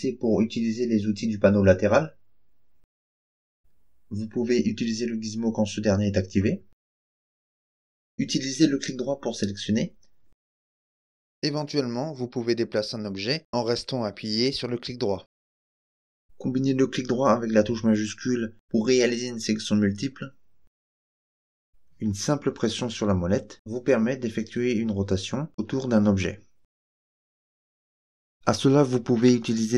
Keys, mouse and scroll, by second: 4.0-5.2 drag, 6.5-8.0 drag, 8.5 right click, 10.2 right click, 12.4-15.7 right drag, 16.2 shift+right click, 17.7 shift+right click, 18.5 shift+right click, 19.3 shift+right click, 20.2 shift+right click, 20.9 shift+right click, 21.6 shift+right click, 22.3-28.3 middle drag, 29.1-29.7 middle drag.